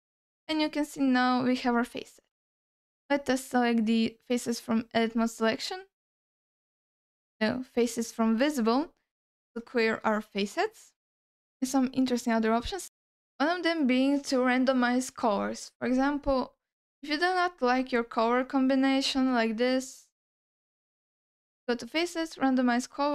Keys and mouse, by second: 0.3 ctrl+middle click, 0.7-2.1 middle drag, 2.4 ctrl+middle click, 3.1-5.1 drag, 6.8-8.3 drag, 9.2 alt+middle click, 9.8 ctrl+alt+middle click, 11.6-15.8 drag, 16.8 click, 17.9-20.5 drag, 21.3-22.2 drag.